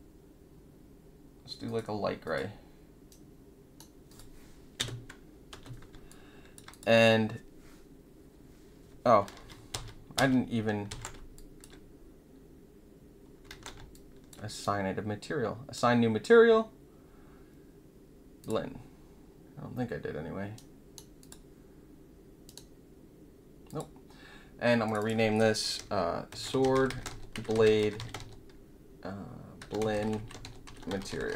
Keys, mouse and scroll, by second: 1.6 click, 2.2 click, 3.2-4.0 right drag, 4.0 click, 4.7 space, 5.5 space, 6.0-6.5 alt+drag, 6.7 click, 9.3 ctrl+z, 9.7 ctrl+z, 10.1 ctrl+z, 10.8 ctrl+z, 11.3 alt+drag, 13.4 ctrl+z, 13.9 alt+click, 14.6-15.7 right drag, 18.4 click, 20.5-21.0 middle drag, 21.1 click, 23.6 click, 24.8 click, 24.9 click, 26.0-31.3 typing.